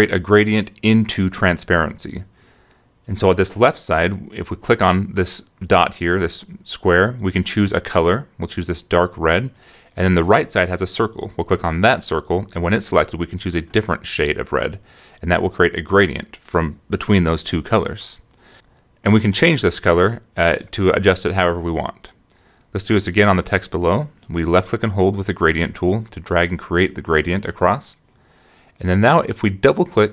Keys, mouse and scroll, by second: 0.4-4.4 drag, 6.1 click, 7.1 scroll up 2, 8.2 click, 10.4 click, 13.2 click, 18.8 click, 20.6 click, 24.4 click, 25.8-29.1 drag.